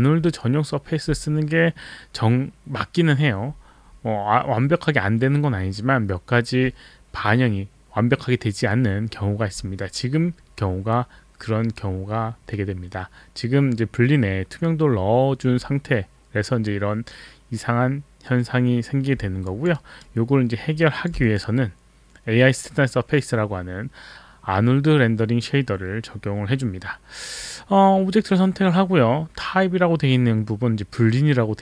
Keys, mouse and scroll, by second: 3.3-3.9 scroll up 1, 3.9-7.4 scroll up 1, 7.4-11.6 scroll up 1, 11.6-15.8 scroll up 1, 15.8-18.0 scroll up 1, 18.0-18.7 scroll up 1, 18.7 scroll up 1, 19.4 alt+click, 19.8 alt+right click, 20.2 alt+middle click, 20.7 alt+click.